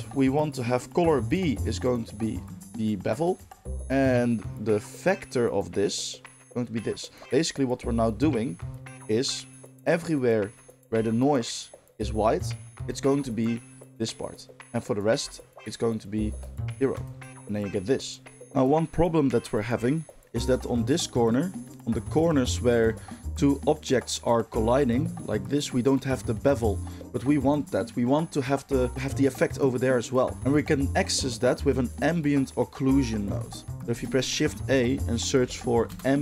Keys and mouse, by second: 1.3-7.2 drag, 7.2-12.4 middle drag, 13.0 ctrl+shift+click, 14.6-16.9 middle drag, 16.9 ctrl+shift+click, 17.0-18.4 ctrl+shift+middle drag, 18.4-23.4 drag, 23.4-23.8 middle drag, 23.8 click, 23.9-31.8 middle drag, 31.8 click, 31.9-33.0 middle drag, 33.0-33.7 drag, 33.4 g, 33.7-36.2 shift+middle drag, 33.9 shift+a.